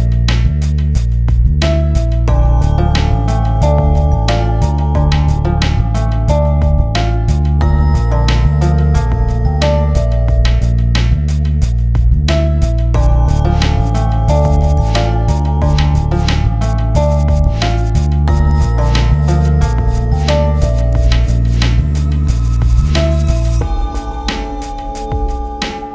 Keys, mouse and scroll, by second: 0.7 scroll up 1, 1.5 click, 3.7 click, 4.5 scroll down 1, 5.8 scroll up 1, 7.1 click, 8.1 scroll up 1, 9.3 F10, 12.9 click, 13.7 ctrl+space, 14.7 click, 17.7 ctrl+z, 19.4 ctrl+click, 20.1 ctrl+space, 21.0-21.7 scroll down 1, 21.7 ctrl+click.